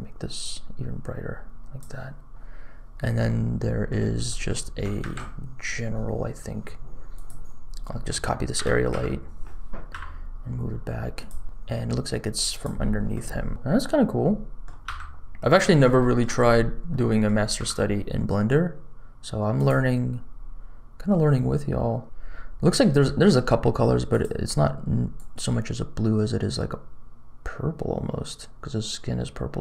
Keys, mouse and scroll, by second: 3.2 middle click, 4.2 middle click, 4.9 shift+a, 7.1 click, 7.6 scroll down 2, 7.8 middle click, 8.1 click, 8.5 shift+d, 11.4 g, 12.7 middle click, 13.5 g, 13.9 middle click, 15.6 scroll up 1, 15.9 shift+middle click, 16.4-16.8 scroll up 2, 16.8 middle click, 17.5 g, 22.0 middle click, 24.0 click.